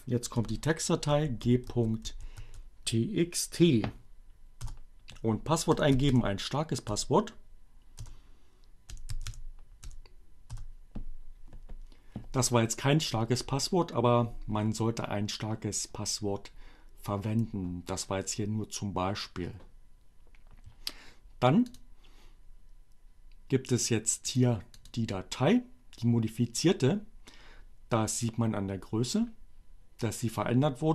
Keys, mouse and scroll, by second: 0.9-2.3 typing, 4.3 Return, 4.7-5.5 typing, 6.9 l, 7.0 Return, 8.7-9.9 typing, 21.8 click, 24.3 click, 24.7 click.